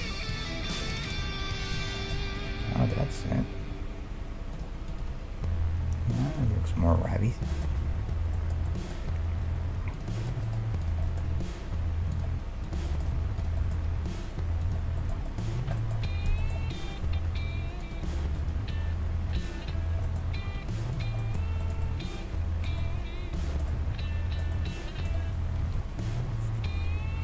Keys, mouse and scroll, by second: 0.1 g, 1.4 g, 2.0-4.0 middle drag, 2.4-3.8 drag, 2.9 g, 3.8 right click, 4.9-6.8 right drag, 5.1 g, 7.2-12.6 middle drag, 9.9-12.6 right drag, 11.4 g, 12.6-15.0 right drag, 12.9-15.9 middle drag, 13.9 g, 16.9-20.1 right drag, 17.2 g, 20.6 g, 25.6 KP_1, 26.9-27.2 scroll up 1.